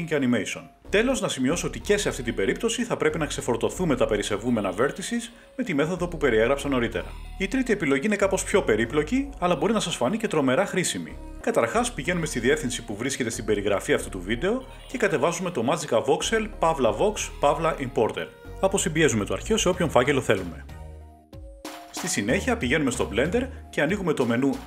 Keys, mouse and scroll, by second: 3.9-6.9 drag, 9.2 click, 10.6 click, 13.8 click, 15.3 click, 18.3 click, 18.8 right click, 19.8 click, 21.4 click, 21.4 Page_Up, 24.1 click.